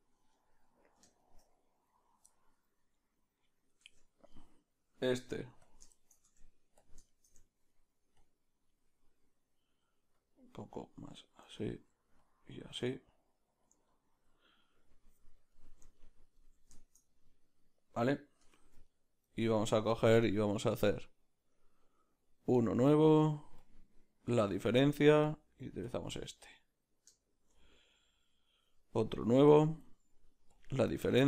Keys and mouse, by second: 1.2 shift+middle click, 1.4 middle click, 4.0 Tab, 4.0 middle click, 4.4-5.7 right drag, 5.7 q, 5.9-8.7 shift+middle drag, 6.8 Tab, 6.8 b, 8.2 click, 8.7-18.5 drag, 11.6 ctrl+middle click, 13.8 ctrl+middle click, 15.5 middle click, 15.9 ctrl+middle click, 16.7 shift+middle click, 18.5 Tab, 18.5-19.6 middle drag, 19.6-22.6 right drag, 22.6-27.2 drag, 27.2-29.6 shift+middle drag, 28.6 click, 29.6-31.2 drag.